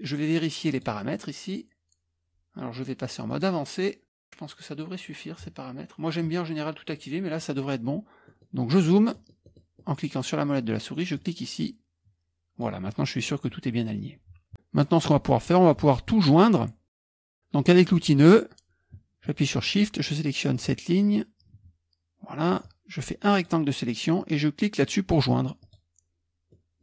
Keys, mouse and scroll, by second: 3.3 click, 8.9-11.1 middle drag, 11.3-13.0 drag, 14.3 KP_Subtract, 14.5-17.8 middle drag, 20.5 shift+click, 22.6-24.0 drag, 25.6 click.